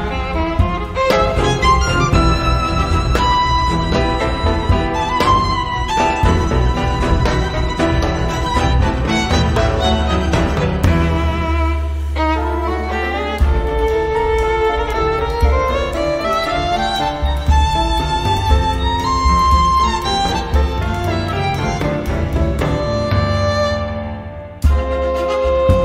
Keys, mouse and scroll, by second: 0.4-0.9 scroll down 1, 1.7 click, 2.7 click, 3.9-4.4 scroll down 1, 4.5-4.8 scroll down 1, 5.8 click, 8.4 click, 9.6 scroll down 1, 10.3 scroll up 1, 11.6 click, 13.5 0, 16.9 click, 18.6-19.6 drag, 20.6-25.1 typing.